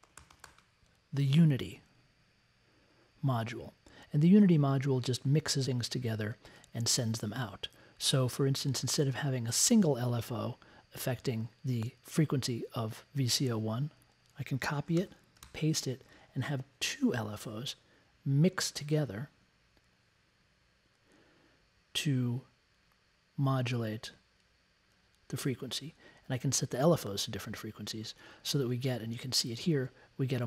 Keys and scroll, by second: 0.0-0.9 typing, 14.9 super+c, 15.4 super+v.